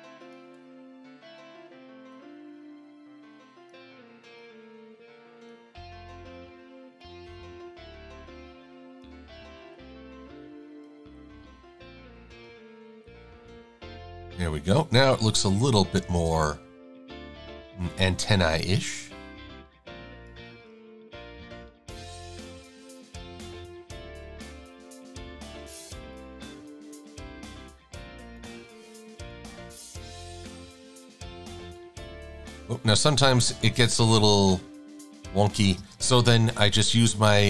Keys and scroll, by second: 7.7 shift+x, 16.2 shift+c, 18.4 a, 21.0 super+=, 24.1 a, 29.5 Right.